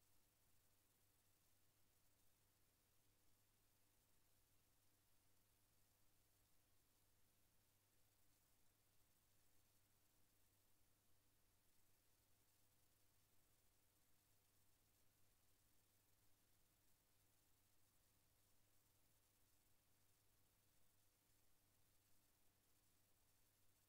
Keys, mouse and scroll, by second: 1.3 click, 10.6 KP_Add, 13.0 KP_Enter, 16.2 click, 19.6 click, 22.1 click, 23.2 KP_Enter.